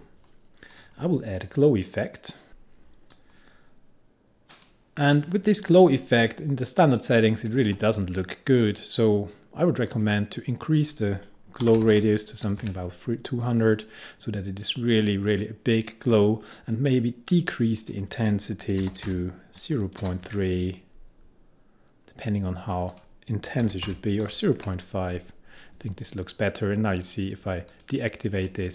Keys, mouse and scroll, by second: 0.0-0.4 typing, 0.8 click, 2.2-3.0 typing, 3.2-7.1 drag, 10.0 click, 11.5-12.5 typing, 17.9 click, 18.9-20.6 typing, 23.0 click, 23.7-24.8 typing, 26.4-27.1 typing, 27.8 click.